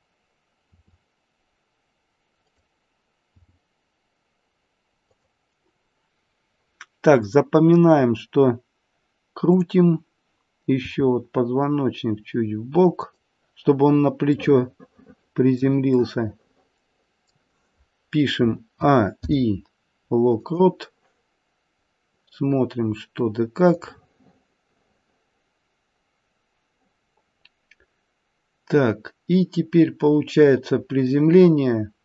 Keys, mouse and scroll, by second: 0.6 r, 3.3 g, 7.2 click, 9.4 click, 10.9 r, 14.5 middle click, 15.1 middle click, 15.4 middle click, 16.0 middle click, 17.2 middle click, 17.9-18.8 scroll down 2, 18.8 a, 19.1 i, 21.7-22.2 scroll down 3, 22.9-23.8 scroll down 4, 23.8 click.